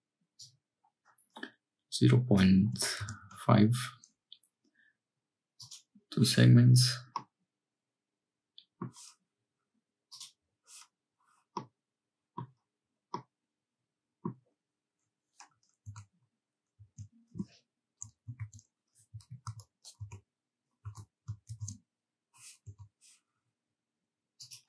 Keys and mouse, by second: 5.5 click, 7.1-8.9 middle drag, 10.1 click, 11.6 click, 13.1-14.3 drag, 15.9 Tab, 16.8 a, 18.3 shift+n, 19.3 ctrl+z, 20.0 Tab, 20.9 Tab, 21.5 shift+n, 22.7 Tab, 24.4-24.6 drag.